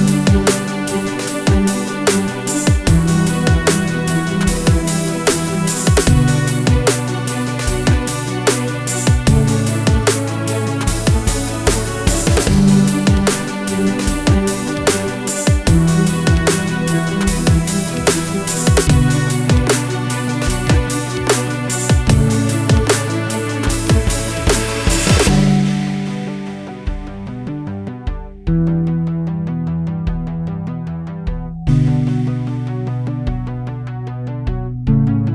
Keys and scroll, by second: 4.0 Return, 4.9 ctrl+c, 5.6 ctrl+v, 6.0 2, 8.5 ctrl+v, 9.1 3, 15.2 typing, 15.8 Return, 25.7-27.8 typing, 31.5-34.6 typing, 33.8 Return.